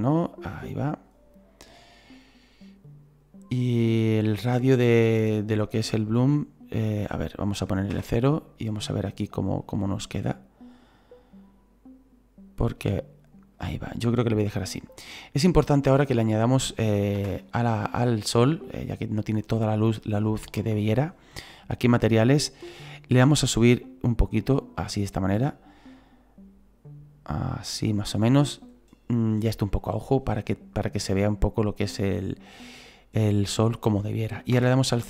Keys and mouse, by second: 2.1 click, 7.9 KP_0, 9.6 click, 13.5 click, 17.2 KP_0, 18.7 middle click, 22.0 click, 24.0 click, 29.6 middle click, 31.3 click, 34.5 KP_0.